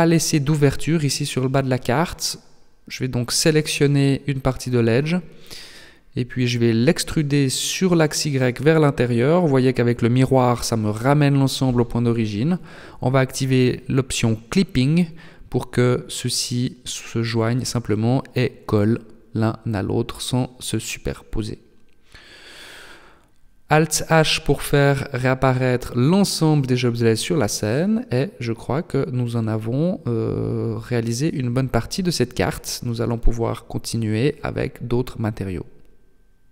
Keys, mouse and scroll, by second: 0.1 alt+right click, 0.6 middle click, 2.5 shift+right click, 3.1 shift+right click, 3.6 middle click, 6.6 e, 11.2 click, 13.2 click, 14.2 middle click, 15.0 KP_3, 16.4 g, 18.9 Tab, 19.4-19.8 scroll down 2, 19.8 middle click, 22.2 alt+h, 23.6 middle click, 29.8-31.8 scroll down 3, 31.8 middle click, 33.0 KP_1.